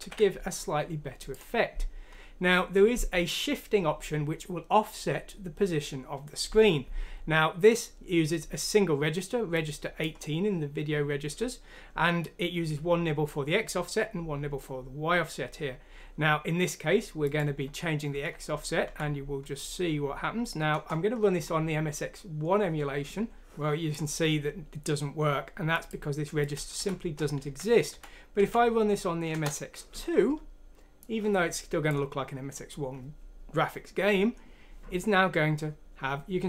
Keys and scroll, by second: 0.0 ctrl+q, 18.8 F6, 20.7 Return, 26.7 F6, 27.4 Down, 27.9 Down, 28.3 Down, 29.3 Return.